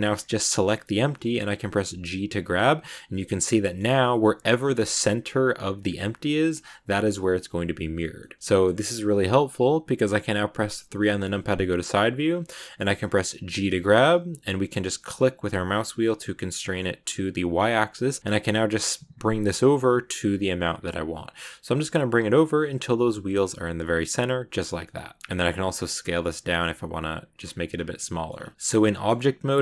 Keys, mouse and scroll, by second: 1.7 g, 3.2 middle click, 3.7 g, 8.1-11.0 middle drag, 11.0 KP_3, 11.9 click, 12.2-13.5 scroll up 1, 13.5 g, 24.2-24.7 scroll down 2, 24.7 middle click, 25.2 scroll up 2, 25.2 s, 27.7 scroll down 1, 27.8 middle click, 28.2-28.8 scroll up 3, 28.5 middle click, 28.8-29.6 middle drag.